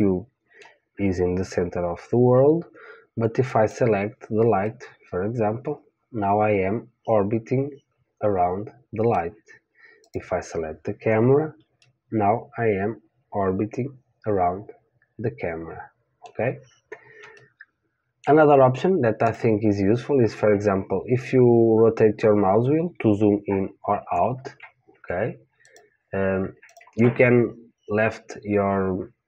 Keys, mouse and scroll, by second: 3.5 click, 4.6-6.8 middle drag, 10.0 click, 12.0-13.8 middle drag, 17.3-19.3 middle drag, 19.2-22.1 drag, 22.1-26.1 middle drag, 25.6-28.7 drag.